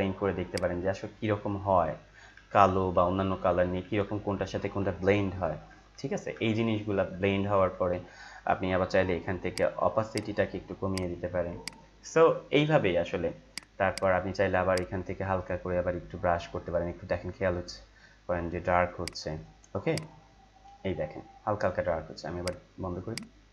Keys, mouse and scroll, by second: 1.7 Up, 9.5-22.4 drag.